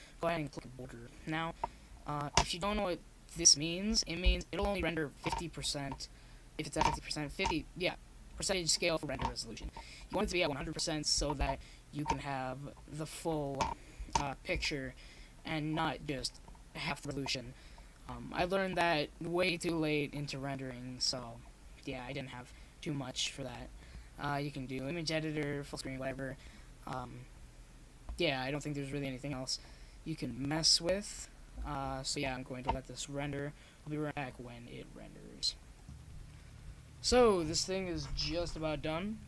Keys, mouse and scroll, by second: 10.2-14.3 middle drag, 11.6-13.2 drag, 14.1-16.1 drag, 17.7-19.8 middle drag, 19.9-21.8 drag.